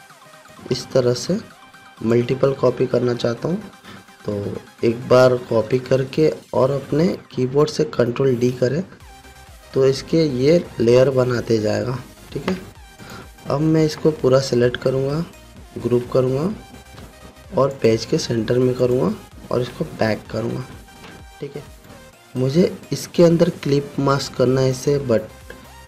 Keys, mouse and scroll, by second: 1.3-2.9 alt+shift+click, 3.5-3.9 alt+scroll down 1, 9.0 ctrl+d, 13.6-15.2 drag, 16.3 ctrl+g, 18.3 click, 21.1 ctrl+shift+[, 22.3 click.